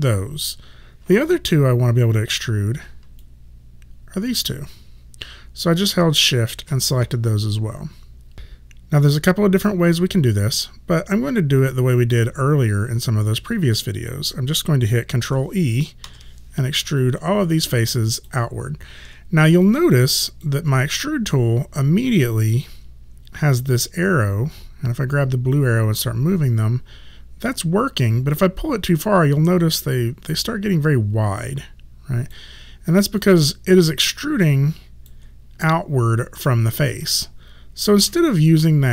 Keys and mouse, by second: 3.3 click, 16.1 ctrl+e, 17.0 click, 19.7 click, 25.6 click, 33.3 alt+click, 38.0 ctrl+z, 38.7 alt+click.